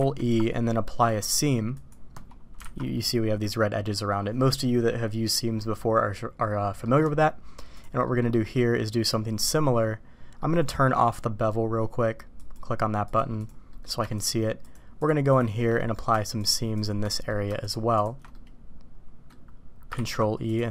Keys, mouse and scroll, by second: 2.6 alt+a, 2.9 middle click, 6.8 middle click, 7.6 click, 8.0 middle click, 10.4 middle click, 12.3 click, 13.1 click, 13.4 click, 13.6 middle click, 14.1 shift+click, 15.3 shift+click, 15.8 middle click, 17.1 middle click, 18.3-19.3 middle drag, 19.9 ctrl+e.